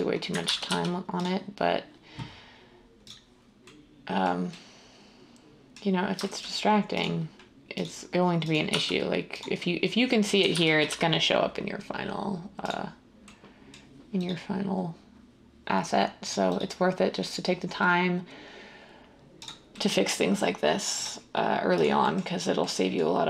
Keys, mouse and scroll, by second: 0.4 ctrl+z, 0.7 x, 8.7 x, 10.5 ctrl+z, 10.9 x.